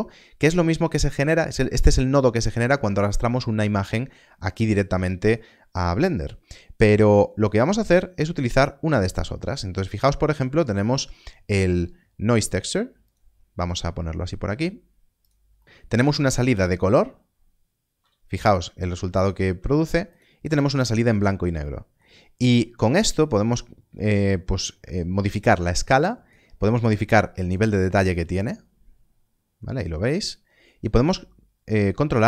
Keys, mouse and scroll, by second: 13.0 shift+a, 15.1 click, 15.5 middle click, 15.6 scroll up 1, 16.4 ctrl+shift+click, 20.0 ctrl+shift+click, 22.2 scroll up 1, 22.9 click.